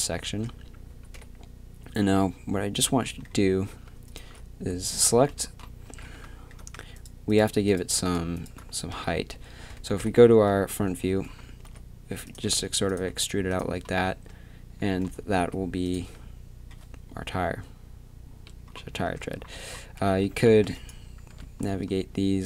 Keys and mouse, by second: 0.2 Tab, 0.9 z, 1.1 KP_1, 3.1 middle click, 4.1-6.0 drag, 4.1 right click, 4.9 z, 5.9 z, 6.0 a, 8.9 KP_3, 9.6 middle click, 10.0 KP_1, 11.0 z, 11.7 e, 14.1 Tab, 14.1 e, 14.8 Tab, 15.4 e, 16.0 Tab, 18.9 Tab, 19.5-21.3 typing.